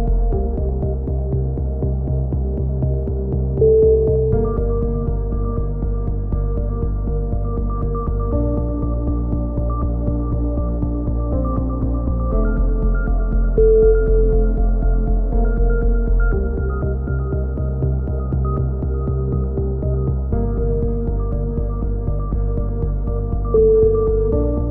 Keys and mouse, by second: 1.3 right click, 1.5 w, 1.8 w, 2.1 a, 2.2 z, 2.4 click, 3.2 right click, 3.6 click, 4.6 click, 4.6 a, 5.8 click, 6.2 right click, 6.7 x, 6.9-8.3 drag, 8.3 right click, 8.7 click, 9.0 right click, 9.3 f, 9.3 a, 9.4 click, 11.4 click, 11.5-13.5 right drag, 12.4 f, 13.0 f, 13.1 a, 13.5 click, 14.2 right click, 14.7 click, 15.2-16.5 right drag, 16.1 click, 16.4 shift+q, 16.7 right click, 17.6-18.7 drag, 18.7 right click, 18.7 shift+q, 18.8 a, 19.0 right click, 19.2 ctrl+l, 19.5 ctrl+n, 19.7 a, 19.8 click, 21.1 click, 21.3 KP_3, 22.8 click, 23.0 click, 24.2 click.